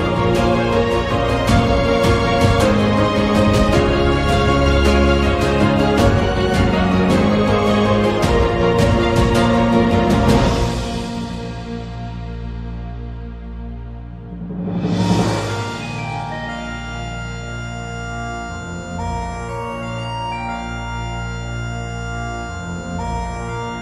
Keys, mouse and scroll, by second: 0.1 1, 0.8 click, 1.4 g, 3.7 click, 4.2 g, 5.5 click, 6.3 ctrl+b, 7.9 Tab, 8.1 middle click, 8.5 shift+middle click, 9.3 Tab, 16.2 Tab, 16.2 middle click, 17.1 Tab, 17.6 click, 18.1 middle click, 22.2 alt+shift+click.